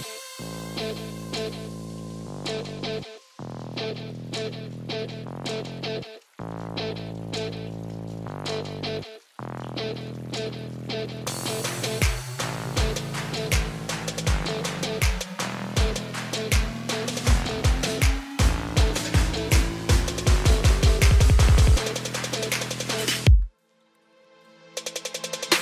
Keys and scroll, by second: 10.4 ctrl+space, 23.5 ctrl+space.